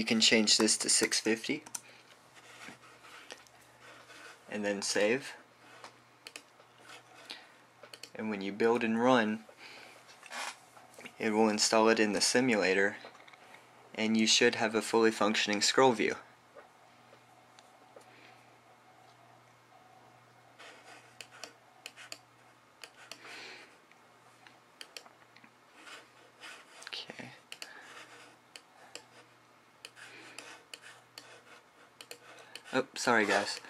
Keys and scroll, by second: 1.3-2.4 typing.